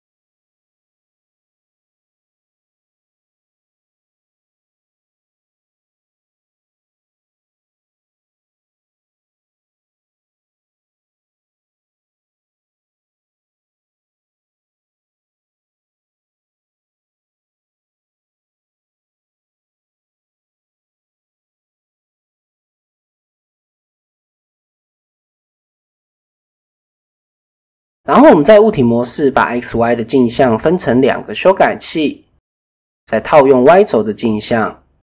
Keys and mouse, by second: 2.1 s, 5.4 middle click, 6.1 middle click, 7.0 KP_1, 7.4 KP_3, 8.4 KP_7, 9.6 s, 12.9 click, 13.6 KP_1, 14.2 KP_3, 14.7 KP_1, 16.9 click, 17.4 middle click, 17.9 middle click, 18.6-20.3 middle drag, 19.3 KP_7, 20.5 shift+click, 21.1 shift+click, 23.0-23.6 drag, 24.8 click, 25.3 Tab, 26.2 click, 28.0-28.7 drag, 30.5 click, 32.9-33.6 drag.